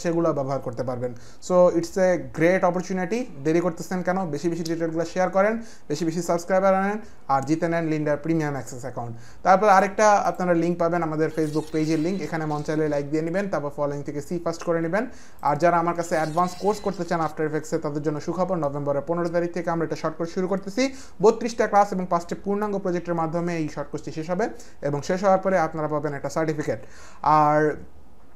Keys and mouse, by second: 9.7 click, 10.3 click, 15.4 click.